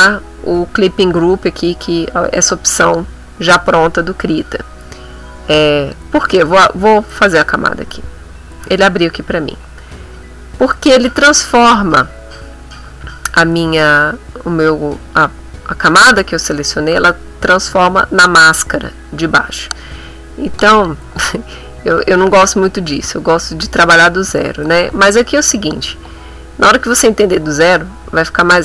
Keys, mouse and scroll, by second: 7.3 click, 10.7 click, 24.7 click.